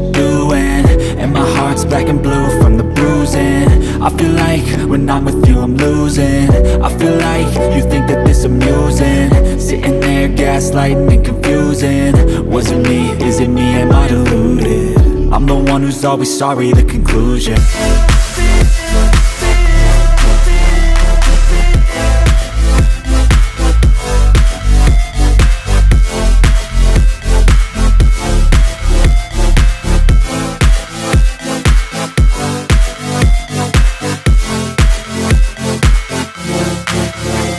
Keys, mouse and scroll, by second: 0.0 space, 0.2 click, 0.5 space, 1.2 space.